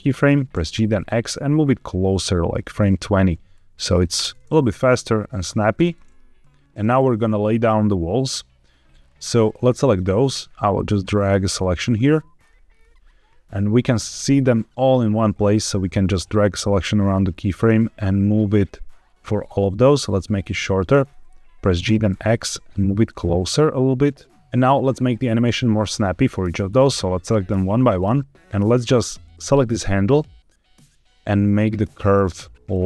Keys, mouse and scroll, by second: 0.4 g, 0.6 x, 2.7 click, 3.4-3.9 drag, 4.0 space, 5.7 space, 6.3-6.7 drag, 7.2-8.8 drag, 8.8 scroll up 2, 8.9 scroll down 2, 9.6-10.3 middle drag, 10.9 click, 12.0-12.5 middle drag, 12.6 scroll up 2, 15.5-17.1 drag, 21.1 Escape, 21.1 x, 21.7 g, 22.0 x, 24.4 shift+middle click, 24.4 right click, 24.4 scroll down 1, 26.6 click, 27.8 click, 28.4 click, 29.1 click, 29.5 click.